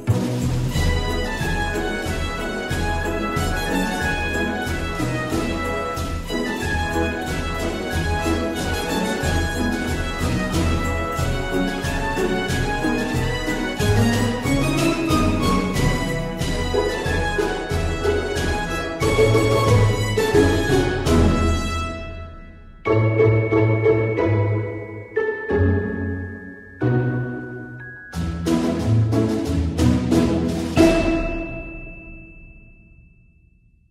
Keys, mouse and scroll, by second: 1.3 v, 14.1 Right, 14.8 BackSpace, 15.7 Return, 24.9-30.2 typing, 26.7 Caps_Lock, 32.6-33.3 typing.